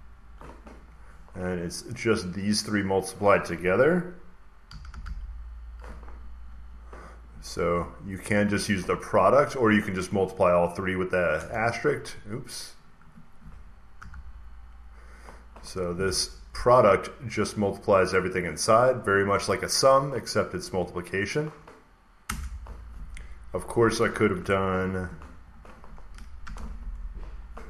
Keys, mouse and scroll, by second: 0.0-0.1 typing, 4.3-5.4 typing, 6.4 Down, 11.2 Return, 12.3 click, 12.7 click, 13.8 typing, 15.8 Tab, 18.3-20.4 drag, 22.1 Return, 23.6-26.3 drag, 24.3 =, 27.1 typing, 27.3 click.